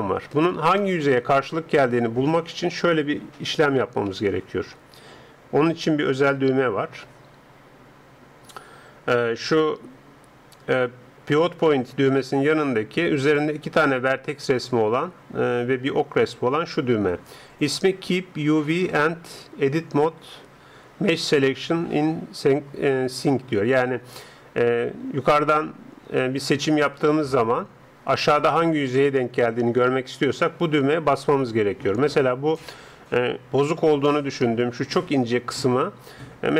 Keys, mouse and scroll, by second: 0.8-4.2 middle drag, 4.2 a, 26.8-36.5 drag.